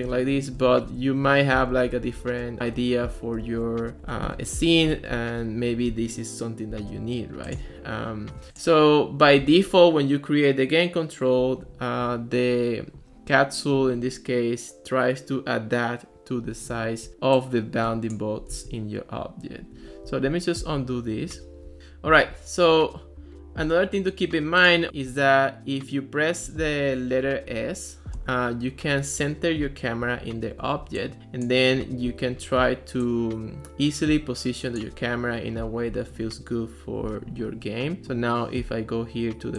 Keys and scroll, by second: 0.0-5.2 typing, 2.6 Right, 17.1 ctrl+s, 20.1 super+z, 28.2 s.